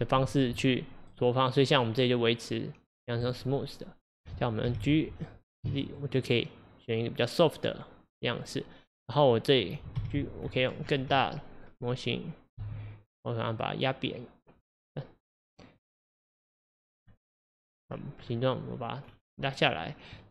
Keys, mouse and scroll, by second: 1.8-4.7 drag, 4.7 g.